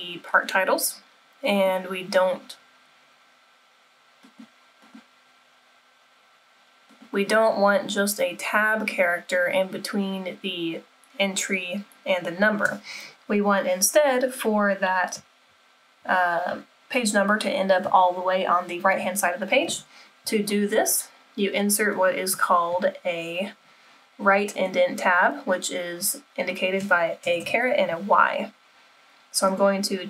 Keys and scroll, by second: 27.3 BackSpace, 27.4 BackSpace.